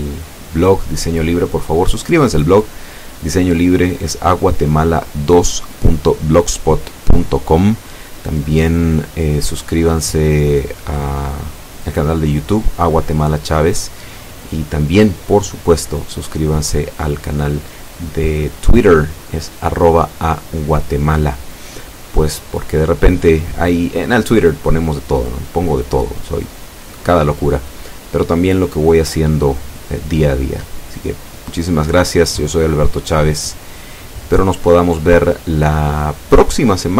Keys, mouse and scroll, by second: 1.4 right click, 2.4 g, 4.4 click, 5.0 r, 7.3 click, 8.2 g, 9.2 click, 10.0 F12.